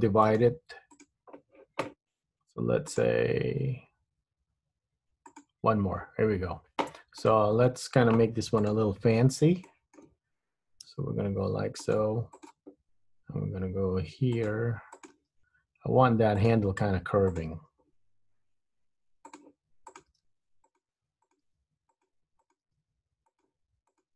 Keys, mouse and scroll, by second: 0.4 right click, 3.0 click, 5.4 click, 7.3 click, 8.7 click, 9.1-9.8 scroll up 3, 9.8 shift+middle click, 11.1 g, 12.5 click, 13.0 g, 15.0 click, 15.3 g, 17.4 click, 17.7 g, 20.0 click, 20.1 g, 21.4 click, 21.5 g, 22.5 click, 22.8 g, 24.1 click.